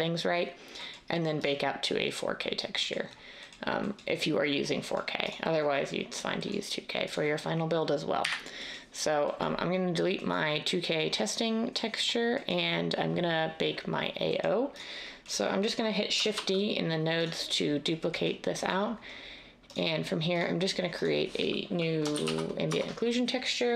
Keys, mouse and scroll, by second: 8.2 Delete, 16.3 d, 22.1-22.7 typing.